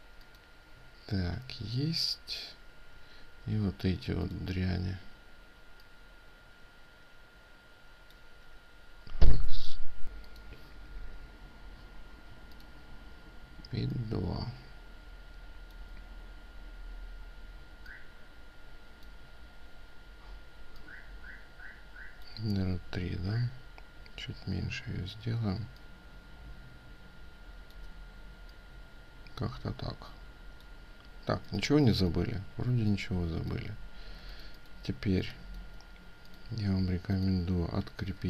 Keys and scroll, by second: 31.5 ctrl+space, 33.9 ctrl+space, 34.6 ctrl+space, 37.7 ctrl+alt+2, 37.7 ctrl+space.